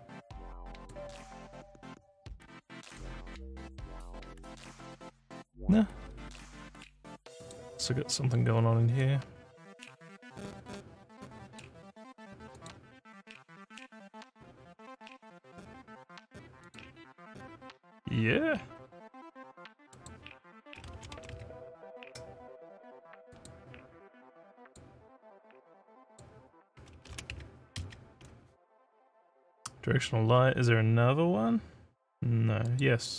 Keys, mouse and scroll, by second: 0.8 click, 2.8 click, 6.0 scroll up 2, 7.4 click, 9.0-11.6 drag, 12.5 click, 16.7 click, 19.9 click, 23.3 click, 24.6 click, 26.1 click, 32.6 click.